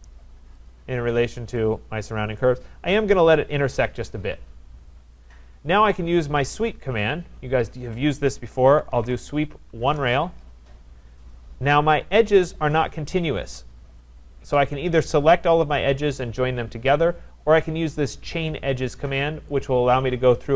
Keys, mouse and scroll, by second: 0.7 click, 2.4 right click, 6.1-6.5 scroll, 8.3-9.9 typing, 14.1 Return, 19.5 click.